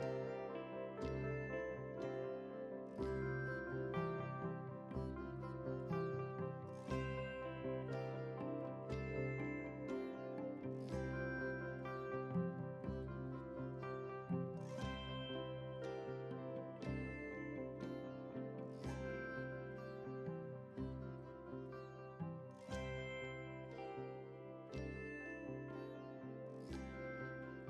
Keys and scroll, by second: 1.8 ctrl+a, 22.7 ctrl+space, 27.4 shift+F11.